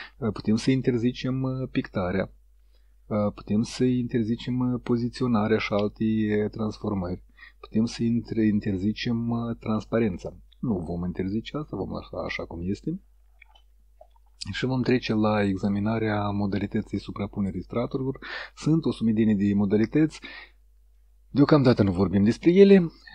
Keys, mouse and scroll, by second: 18.3 click, 18.9 click, 19.5 click, 19.9 click, 20.6 click, 21.0 click.